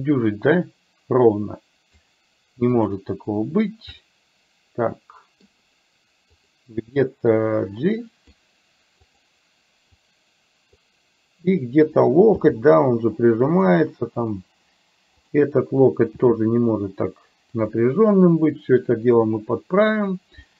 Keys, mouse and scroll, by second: 2.8 click, 4.1-5.4 middle drag, 6.4 click, 7.6 click, 9.1 click, 9.9 click, 10.2 click, 11.7 click, 12.3 g, 16.3 g, 18.2-20.1 middle drag, 20.4 middle click.